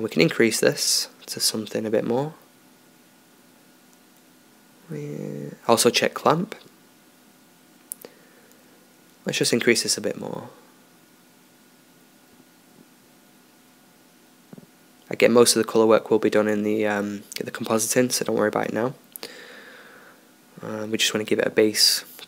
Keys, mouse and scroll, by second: 0.9-3.0 drag, 10.5 click, 13.9 click, 15.6 BackSpace, 15.8 BackSpace.